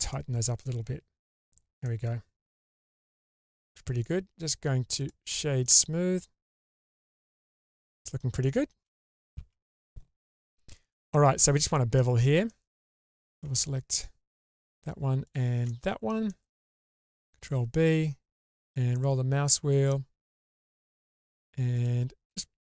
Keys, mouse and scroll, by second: 0.1 middle click, 0.7 Tab, 1.3-1.8 scroll down 3, 1.8-3.8 middle drag, 4.4 right click, 5.6-7.0 middle drag, 7.2-7.5 shift+middle drag, 7.8-8.2 middle drag, 8.4-8.8 shift+middle drag, 8.9 middle click, 9.4 Tab, 11.1 middle click, 11.6-11.9 scroll up 1, 12.0 shift+middle click, 12.5 middle click, 13.1 alt+click, 13.6 middle click, 15.2 alt+shift+click, 15.7 middle click, 16.3 shift+middle click, 17.4 ctrl+b, 22.6 scroll up 1.